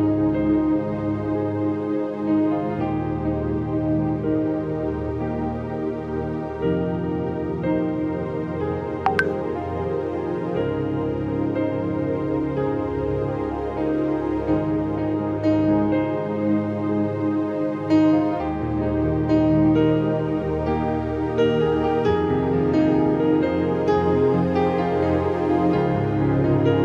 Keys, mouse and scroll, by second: 2.0 click, 2.6-4.6 drag, 4.2 space, 4.6 space, 5.7-8.1 drag, 8.0 scroll down 1, 8.1 space, 8.1 click, 8.5-9.2 scroll up 1, 9.2-9.8 scroll up 5, 9.6 click, 11.5 click, 11.5 scroll up 1, 12.5-16.0 drag, 16.0 click, 16.3 click, 17.8 alt+click, 18.3 alt+click, 19.4-20.6 scroll up 8, 20.7 ctrl+i, 21.4 scroll up 1, 21.7-24.7 typing, 22.9 scroll up 1, 24.0 scroll up 3, 24.8 scroll down 1, 25.2-26.8 drag, 25.7 ctrl+z, 26.2 shift+#.